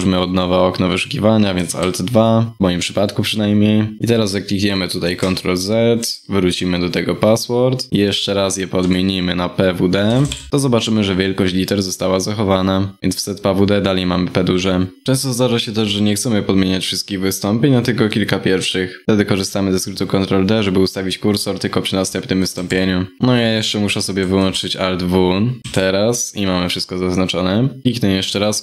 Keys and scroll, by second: 22.1 ctrl+d, 23.9 alt+w, 25.6 ctrl+d, 28.2 ctrl+d.